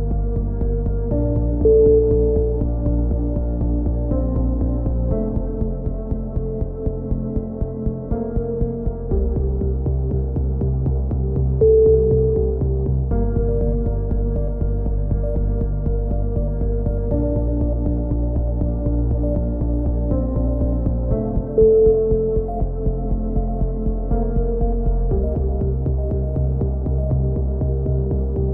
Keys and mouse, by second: 0.9 KP_7, 1.9 s, 7.7 a, 8.1-9.6 middle drag, 9.6-10.7 drag, 12.9-14.6 right drag, 13.9-15.0 drag, 15.0-17.1 right drag, 16.7 KP_7, 18.0 s, 20.5 c, 21.7-22.8 drag, 22.5 s, 24.2 c, 25.3-26.4 right drag, 25.9 s, 27.6 c.